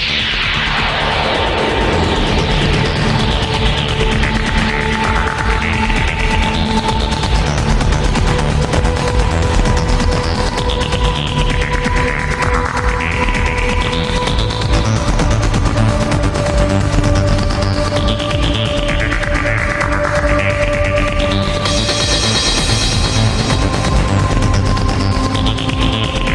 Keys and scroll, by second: 10.3 ctrl+z.